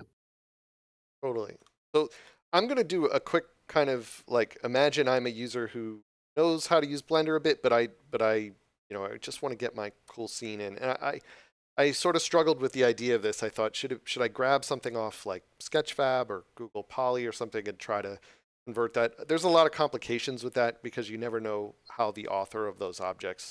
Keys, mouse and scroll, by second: 0.4 click, 1.5 middle click.